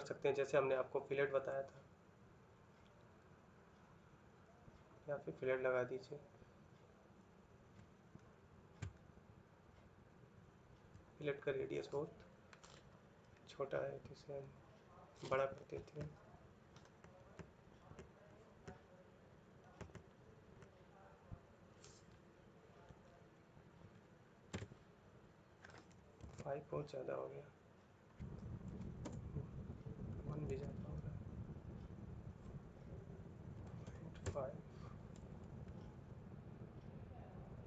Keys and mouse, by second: 7.9 shift+middle click, 8.6 ctrl+middle click, 17.8 click, 19.6 click, 19.8 click, 20.8 click, 24.3 Return, 28.8 Return, 28.8 typing, 30.2 ctrl+z, 34.0 Return, 34.0 typing, 35.7 ctrl+middle click.